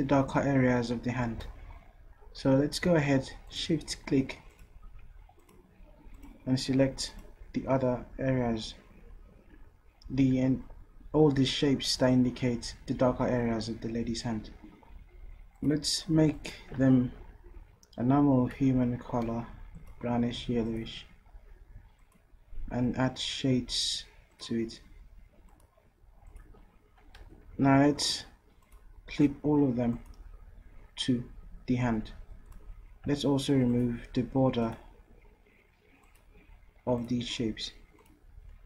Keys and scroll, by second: 1.4 v, 27.2 ctrl+z.